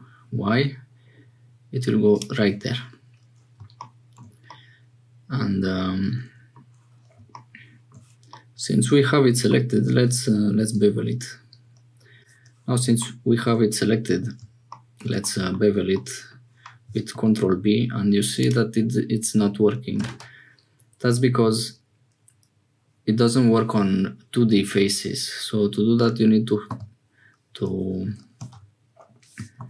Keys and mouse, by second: 4.5-6.6 middle drag, 8.3-9.5 middle drag, 10.9 ctrl+b, 15.2 middle click, 15.9 middle click, 17.1 ctrl+b, 26.7 v, 28.3 ctrl+z, 29.5 ctrl+b.